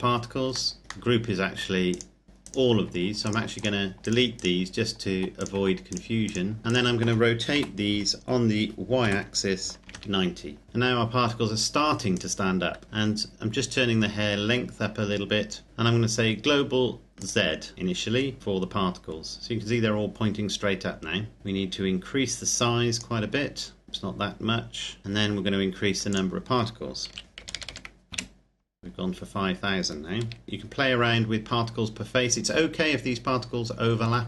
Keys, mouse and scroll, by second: 0.2 scroll up 1, 0.4 scroll down 1, 0.7 middle click, 0.8 right click, 1.1 middle click, 1.9 right click, 3.2 shift+right click, 5.3 right click, 7.5 r, 9.0 y, 9.8 KP_9, 10.6 KP_0, 12.2 right click, 12.8 click, 17.2 click, 19.0-21.4 scroll up 1, 21.4 click, 23.3-23.8 scroll down 1, 23.8 click, 25.1-26.0 scroll up 1, 26.0 click, 27.0 KP_5, 27.3 KP_0, 28.1 KP_Enter, 30.2 KP_0, 30.4 click.